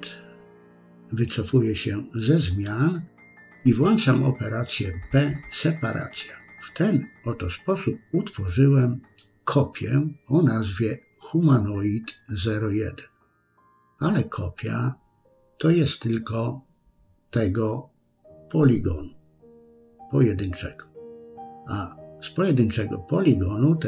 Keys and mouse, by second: 2.8 p, 4.8-5.8 middle drag, 7.1 Tab, 8.9 click, 12.0 click, 12.2-16.3 drag, 20.6 Tab, 22.8 a, 23.5 s.